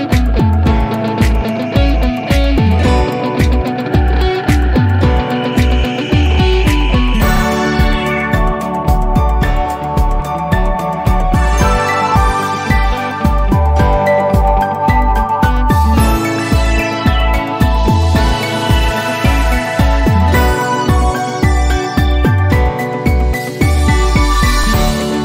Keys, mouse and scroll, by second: 2.7 right click, 5.7 click, 13.0 click, 15.0 click, 17.0 alt+middle click, 22.0-22.5 alt+middle click, 22.7-23.0 scroll down 1.